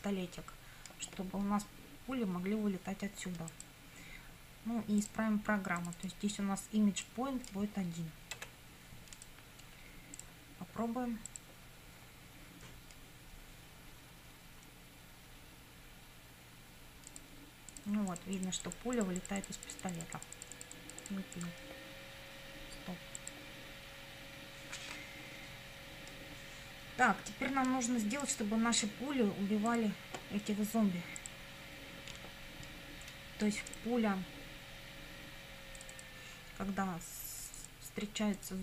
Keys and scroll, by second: 8.4 1.